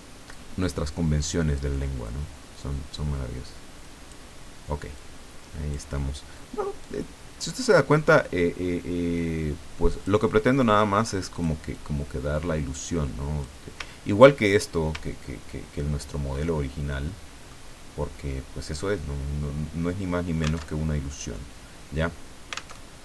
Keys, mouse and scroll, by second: 1.2 click, 3.9 click, 4.9 click, 6.8-10.3 drag, 11.3 click, 11.7-13.7 drag, 14.0-15.4 ctrl+scroll down 7, 15.9 ctrl+scroll down 2, 16.4 ctrl+middle click, 17.4 click, 20.7 alt+Tab, 22.7 alt+Tab.